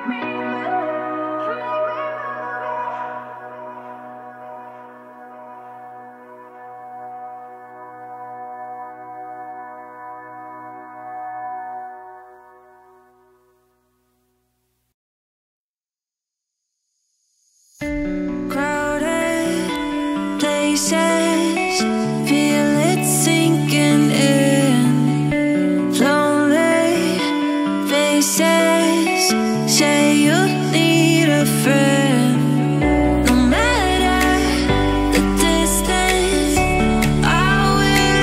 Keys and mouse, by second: 0.0 ctrl+s, 0.0 click, 1.5 click, 2.3-4.7 middle drag, 5.7 g, 6.9 y, 9.2 drag, 9.4-10.5 middle drag, 11.1-13.3 drag, 13.4 ctrl+s, 17.8-19.6 drag, 23.5-25.5 drag, 27.0 Tab, 27.5-28.3 middle drag, 30.1 middle drag, 30.5-31.1 drag, 31.1 g, 32.6 click, 33.0 g, 34.2 middle click, 35.2 alt+m, 37.0 click, 37.4 middle click, 38.0 g.